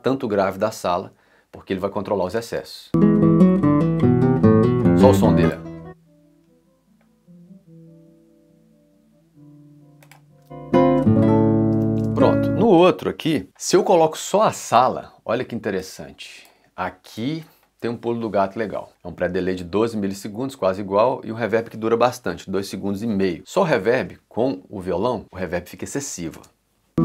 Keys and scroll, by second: 2.3 space, 5.2 s, 10.4 s, 11.7 c, 12.0 space, 26.4 space.